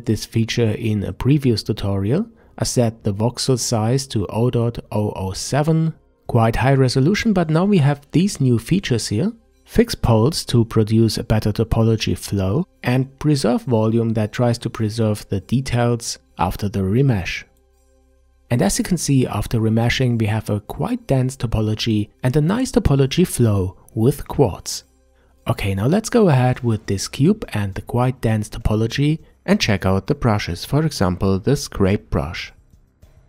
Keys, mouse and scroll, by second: 16.0 Tab, 17.0-20.1 ctrl+middle drag, 25.2 Tab, 27.1 ctrl+s, 31.4 click, 32.1-33.2 middle drag.